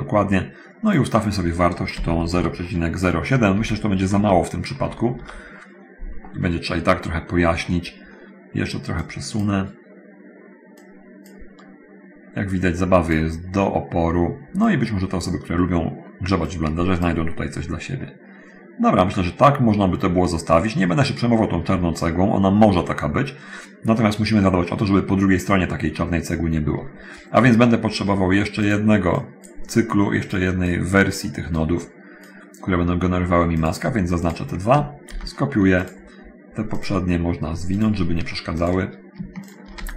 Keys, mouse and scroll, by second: 1.1 click, 2.0 ., 2.5 0, 3.8 0, 4.4 BackSpace, 4.5 6, 5.0 7, 5.4 Return, 9.1 click, 10.7 click, 12.8 click, 14.9 click, 16.6 click, 28.7 click, 29.4 click, 30.1 click, 30.9 click, 31.6 click, 33.8 click, 34.4 shift+click, 35.3 ctrl+shift+d, 37.0 click, 37.6 click, 38.8 click, 39.4 shift+click.